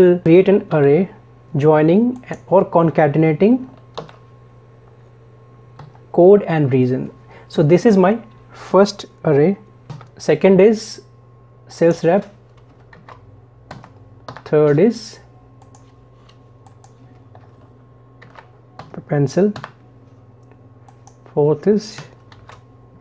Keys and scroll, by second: 0.7 ctrl+shift+Down, 4.0 ctrl+shift+Down, 13.0 ctrl+shift+Down, 22.3 ctrl+shift+Down.